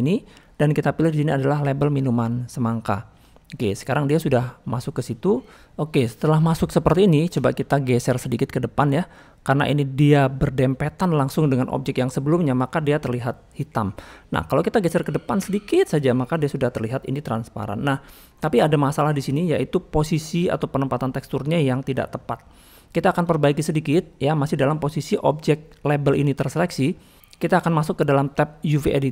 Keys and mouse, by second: 3.8-5.2 middle drag, 6.0-6.3 middle drag, 7.1 shift+middle click, 7.4-7.7 middle drag, 8.7 click, 9.5-11.0 drag, 11.7-12.0 middle drag, 12.7 middle click, 13.5-14.0 middle drag, 14.2-14.5 middle drag, 14.9 middle click, 16.0-16.7 middle drag, 17.6-18.0 middle drag, 23.1 middle click, 23.8-24.3 middle drag, 26.7 middle click.